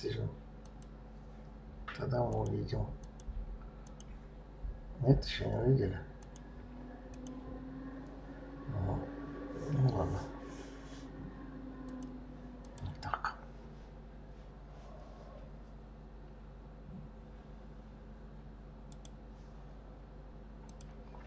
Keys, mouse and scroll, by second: 0.6 click, 2.3 click, 3.0 click, 3.8 click, 6.2 click, 7.1 click, 11.9 click, 12.6 click, 14.0-14.7 scroll down 1.